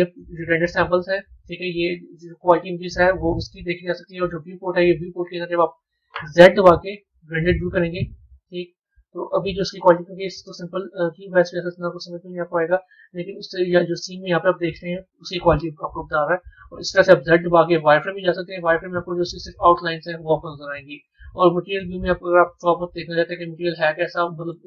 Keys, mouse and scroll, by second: 0.0 click, 12.8-15.5 middle drag, 15.5 scroll up 1, 17.1 z, 19.0-20.6 middle drag, 20.6 z, 23.2-24.6 middle drag.